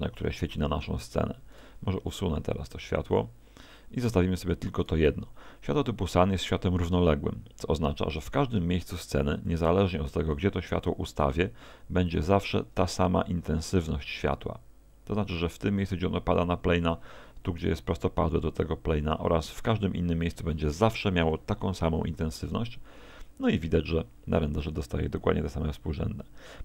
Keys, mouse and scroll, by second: 0.6 click, 1.5 right click, 2.7 x, 4.8 right click, 8.7 g, 9.5 click, 10.4 g, 11.7 g, 12.2 click.